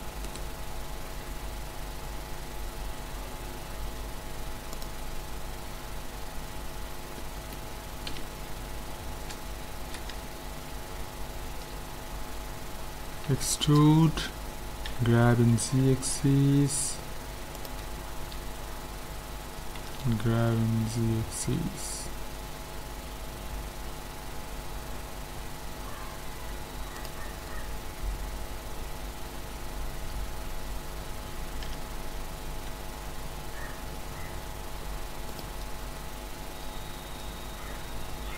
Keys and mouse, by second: 0.3-2.0 drag, 1.3 Tab, 4.7-6.5 drag, 6.2 a, 7.2-9.4 middle drag, 8.1 KP_1, 11.6-13.3 middle drag, 13.3 e, 14.9 g, 17.9-20.9 middle drag, 19.8 g, 27.3-32.7 middle drag, 31.7 g, 35.9-38.3 middle drag.